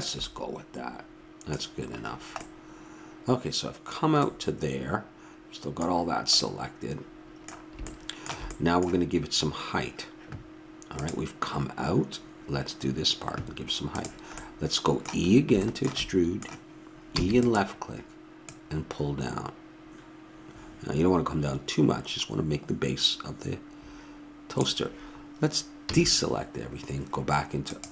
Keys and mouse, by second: 0.6-2.2 middle drag, 6.1-6.7 middle drag, 17.1 e, 18.4-20.2 drag, 25.8 a, 27.7-27.9 drag.